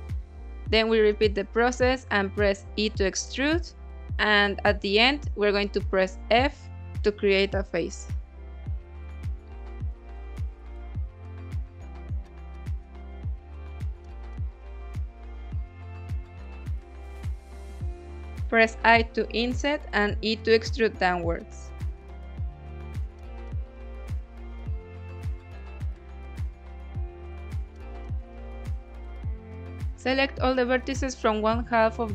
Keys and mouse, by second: 0.3 e, 2.0 z, 3.3 click, 4.5 g, 4.6 z, 5.4 click, 5.7 s, 7.4 click, 7.8 e, 8.4 z, 9.7 click, 10.2 s, 10.9 click, 11.4-13.9 middle drag, 14.1 f, 14.8 middle click, 15.4 shift+middle click, 16.0 middle click, 16.6 ctrl+s, 16.6 middle click, 18.1 i, 21.2 click, 22.3 e, 26.0 click, 26.4-27.7 middle drag, 29.4 click, 31.0 middle click.